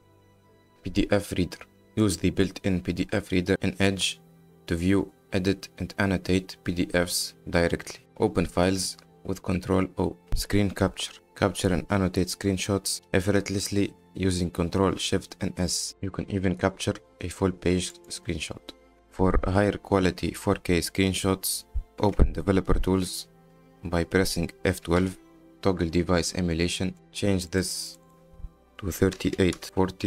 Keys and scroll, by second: 9.1 ctrl+o, 10.3 ctrl+shift+s, 14.4 ctrl+shift+s, 23.4 F12, 26.9 Return, 29.6 KP_8, 29.8 KP_4.